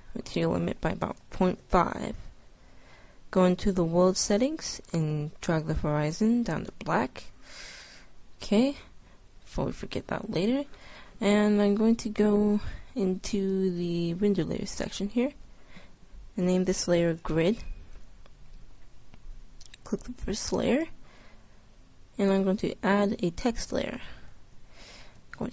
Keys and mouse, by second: 1.4 click, 3.4-6.7 drag, 10.1-13.3 middle drag, 13.3-17.3 drag, 19.9-21.7 drag, 22.3-25.0 drag.